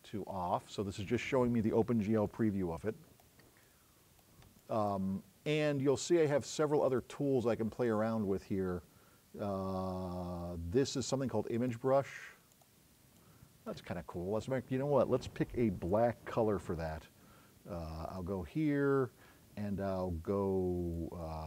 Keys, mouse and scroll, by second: 6.9 click, 12.6 click, 13.2 click.